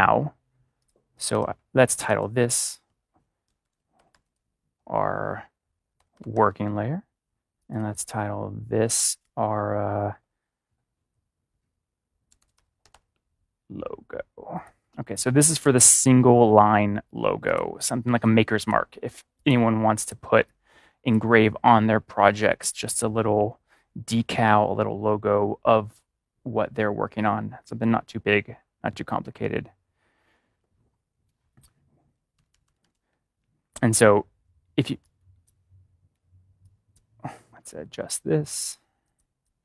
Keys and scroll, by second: 3.3 ctrl+=, 3.5-4.0 typing, 5.9-6.7 typing, 12.1-12.9 typing, 15.6 ctrl+-, 32.1 ctrl+-, 32.3 ctrl+=, 34.9 ctrl+=, 35.2 space, 36.5 space, 37.8 a.